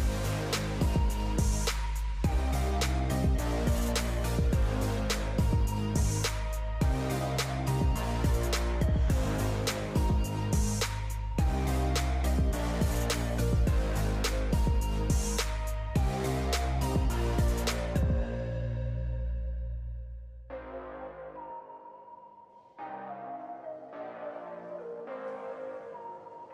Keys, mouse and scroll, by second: 1.2 click, 2.3 click, 3.6 i, 6.8 click, 8.8 e, 10.8 click, 14.1 click, 15.3-18.0 drag, 18.0 s, 20.0-22.2 drag, 22.2 ctrl+i, 25.8-26.5 drag.